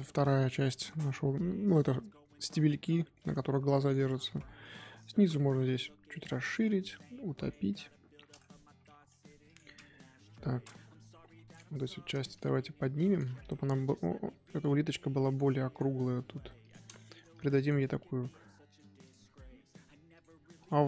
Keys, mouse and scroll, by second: 2.9 shift+middle drag, 3.2-3.8 scroll up 2, 3.8 click, 4.6-7.7 drag, 7.7-9.1 middle drag, 9.1 Tab, 9.4 click, 10.1 KP_1, 11.0 Tab, 11.4 click, 12.3 click, 13.1 click, 15.7 click, 16.9 shift+middle click, 17.6 click, 19.0 click, 20.6 click.